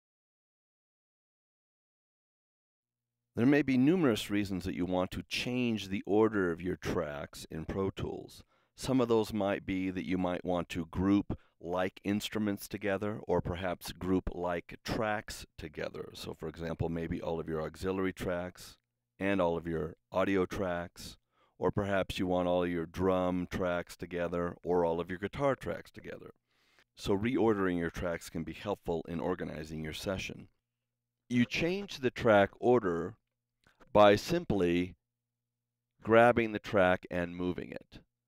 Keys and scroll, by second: 33.2 super+=.